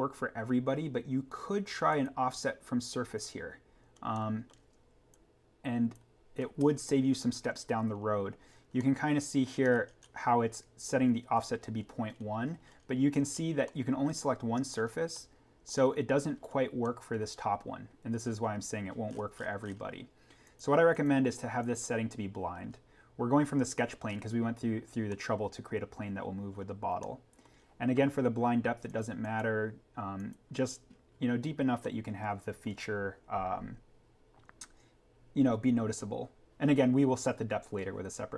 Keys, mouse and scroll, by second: 1.9 click, 4.0 scroll down 1, 4.1 middle click, 5.1 click, 6.4 1, 6.6 Tab, 7.7 scroll up 1, 13.6 middle click, 14.7-15.2 scroll down 1, 15.2 middle click, 15.5 scroll, 16.8 middle click, 18.2-20.4 scroll up 1, 20.4 click, 22.5-23.8 scroll up 1, 27.0 middle click, 27.1 scroll, 28.8 click, 30.7-31.8 scroll up 1, 32.0-32.4 scroll.